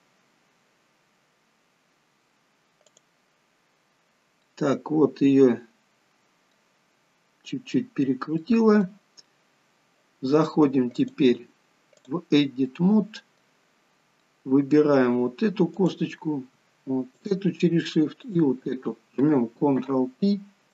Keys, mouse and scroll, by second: 4.4 middle click, 8.4 middle click, 10.9 click, 12.7 middle click, 13.7 scroll up 2, 14.2 middle click, 15.7 click, 17.3 shift+click, 18.7 shift+click, 19.8 ctrl+p.